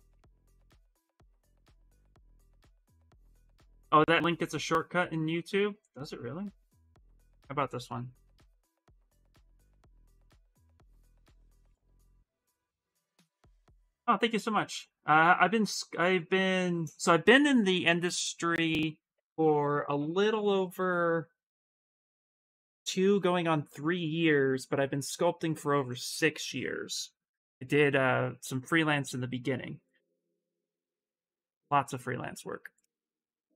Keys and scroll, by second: 7.2 ctrl+c, 8.8 ctrl+v, 9.6 Return.